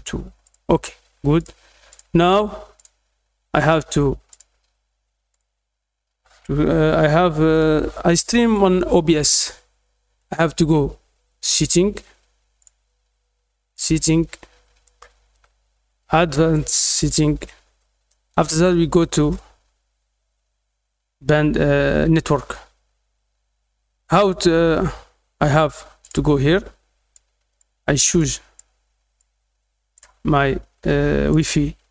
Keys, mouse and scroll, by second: 0.4 click, 1.3 click, 1.8 click, 2.7 click, 4.2 click, 5.3 click, 7.5-8.5 drag, 11.4 click, 12.5 click, 13.7 click, 16.9 click, 17.7-18.3 scroll down 2, 18.7-19.0 scroll down 2, 19.0 middle click, 26.0 click, 27.1-27.5 drag, 28.1-28.5 drag, 29.1 click, 31.2 click.